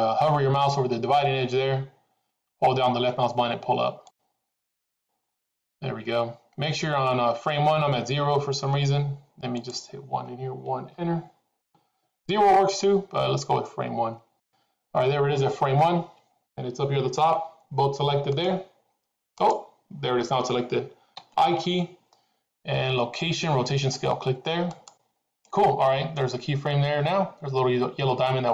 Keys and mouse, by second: 4.0-5.2 drag, 9.5-12.3 drag, 18.2 click, 19.3 click.